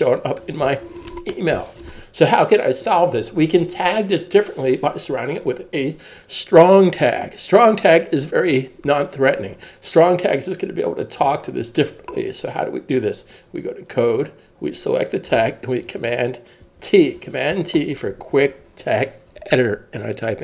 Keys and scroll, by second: 16.6 super+t.